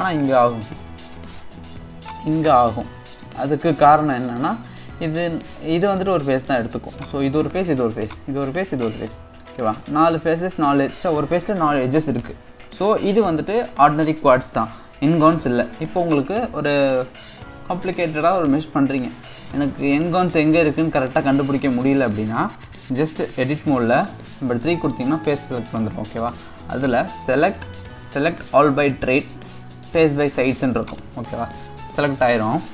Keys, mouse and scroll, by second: 1.1 ctrl+r, 2.9-6.4 middle drag, 6.4 click, 7.0 click, 7.7 3, 8.1 click, 8.8 click, 16.0 click, 18.9-19.3 scroll down 1, 19.3-22.3 middle drag, 26.8-30.0 drag, 31.9-32.7 scroll up 1.